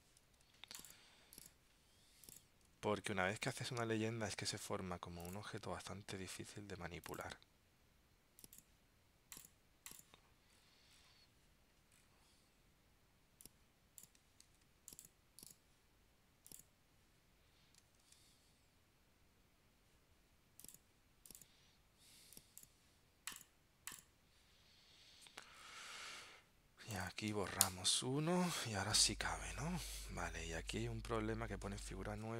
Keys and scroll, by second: 0.4 super+x, 3.6 super+v, 14.6 super+x, 18.1 super+v.